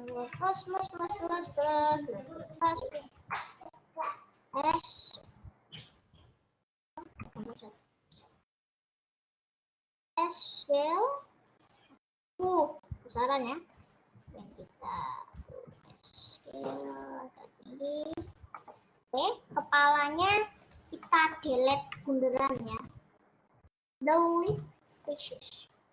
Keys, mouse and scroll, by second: 0.4 KP_Add, 0.6 KP_Add, 0.8 KP_Add, 1.0 KP_Add, 1.2 KP_Add, 1.4 KP_Add, 2.0 KP_Add, 2.2 KP_Add, 2.3 KP_Add, 2.6 KP_Add, 4.7 s, 6.6 click, 7.4 ctrl+z, 8.0 ctrl+z, 9.2 KP_Subtract, 10.2 s, 11.7-12.4 scroll down 2, 12.6 s, 14.6 click, 16.2 s, 18.9 middle click, 19.3-19.8 scroll up 2, 20.8 click, 21.2 middle click, 22.0 KP_Add, 22.2 KP_Add, 22.6 KP_Add, 22.8 KP_Add, 25.3 Delete.